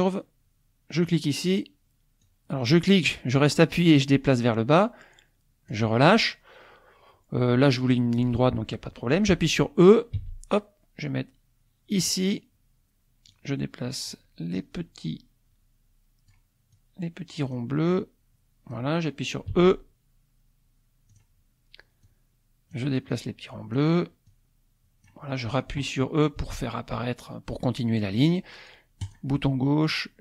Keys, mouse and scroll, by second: 0.9 click, 2.2-5.9 drag, 10.2 e, 11.9 click, 13.3 click, 14.6-17.7 drag, 18.0 click, 19.6 e, 21.1 click, 22.1-23.9 drag, 24.3-25.3 drag, 26.4 e, 29.0 click, 30.0-30.2 drag.